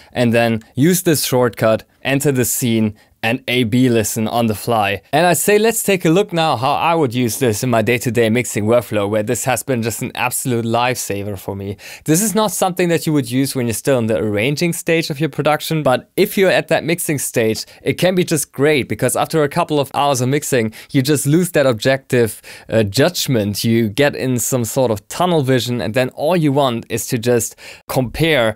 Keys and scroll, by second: 0.3 ctrl+super+s.